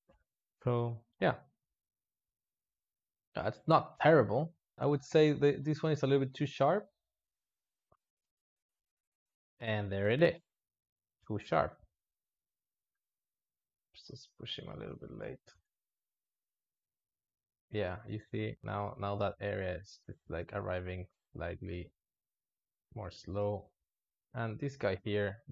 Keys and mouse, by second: 0.7 alt+shift+z, 4.7 space, 5.0 click, 5.5-5.9 drag, 6.2 space, 7.2 alt+shift+z, 7.7 click, 7.9 ctrl+middle click, 8.1 `, 8.9 Home, 9.2-11.5 drag, 13.1-15.2 drag, 15.2 space, 20.0 space, 20.7-23.2 drag, 23.2-24.5 shift+middle drag, 24.5-25.5 drag.